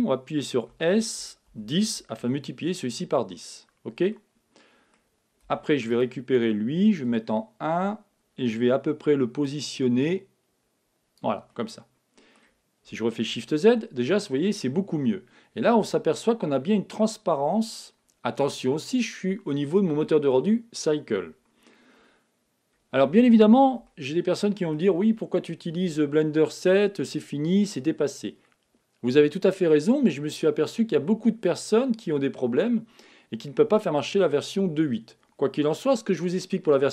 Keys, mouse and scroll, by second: 0.7 s, 3.5-5.9 middle drag, 5.4 Tab, 5.9-7.7 right drag, 9.4-11.3 drag, 11.5-13.2 middle drag, 14.6-15.4 scroll up 1, 15.4-16.5 scroll up 1, 16.5-18.5 middle drag, 22.5-24.0 scroll up 1, 24.0-25.7 middle drag, 25.7-26.7 scroll up 1.